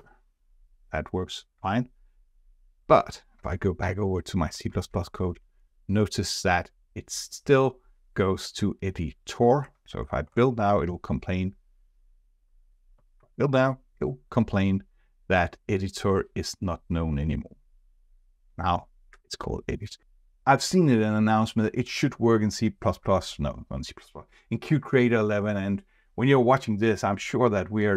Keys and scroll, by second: 3.8 shift+F4, 13.2 ctrl+b.